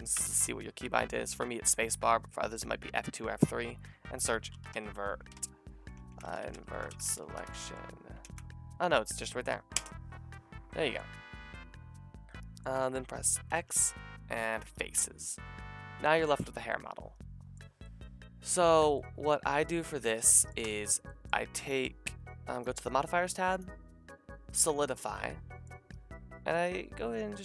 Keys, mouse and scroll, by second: 0.2 space, 13.5 x, 20.0-22.6 drag, 20.6 Tab, 22.6 middle click, 23.8-27.4 middle drag.